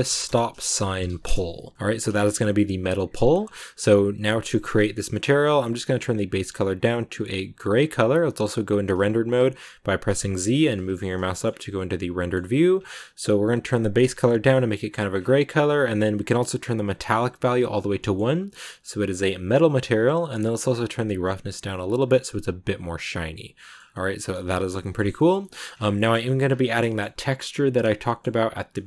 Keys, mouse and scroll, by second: 1.7 scroll down 1, 2.0-6.3 shift+middle drag, 6.3 click, 8.4 z, 10.7 z, 11.2-14.0 shift+middle drag, 14.0 click, 16.1 scroll down 6, 17.0 click, 17.9-20.8 shift+middle drag, 20.8-22.1 drag, 22.1-23.7 middle drag, 23.7 scroll down 1, 23.8 middle click, 24.4-25.0 scroll up 2, 24.4 shift+middle click, 25.0 shift+middle click, 25.6 scroll up 1, 25.8 shift+middle click, 26.3 scroll down 2, 26.5-28.8 shift+middle drag.